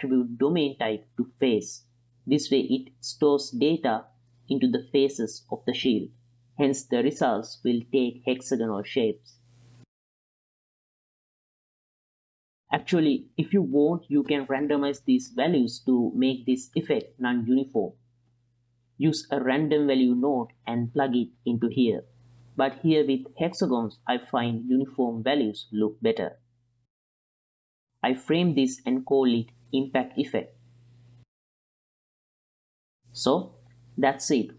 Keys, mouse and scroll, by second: 3.5 space, 5.7-9.8 drag, 9.8-10.6 drag, 10.6 click, 11.0 ctrl+middle click, 11.2 click, 11.6 click, 11.8 middle click, 11.9 click, 12.2 click, 12.4 middle click, 12.5 click, 12.6 click, 12.6 middle click, 13.3 click, 16.7 ctrl+middle click, 19.1 shift+a, 21.8-22.6 drag, 23.4 click, 25.6 x, 26.6 ctrl+middle click, 28.0 middle click, 28.3 click, 28.7 click, 29.2 shift+p, 29.5 F2, 31.9 n, 32.6 click, 33.6 click, 33.9 n, 34.2-34.5 drag.